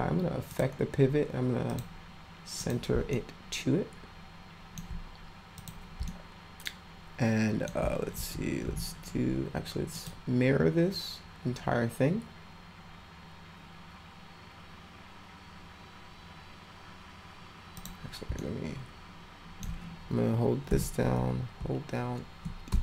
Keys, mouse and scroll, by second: 0.5 click, 1.7 click, 2.6 click, 3.1-4.7 alt+middle drag, 5.5 click, 6.1-7.7 alt+middle drag, 8.3 w, 9.9 click, 17.8 click, 18.4-19.6 alt+middle drag.